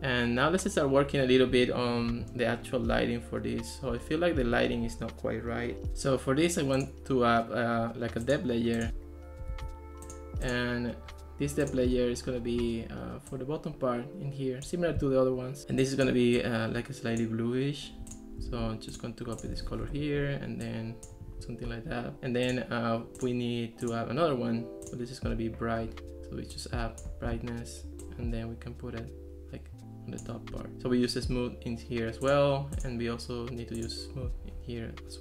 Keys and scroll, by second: 9.5 super+z, 18.7 super+c, 19.7 super+v, 19.9 Return.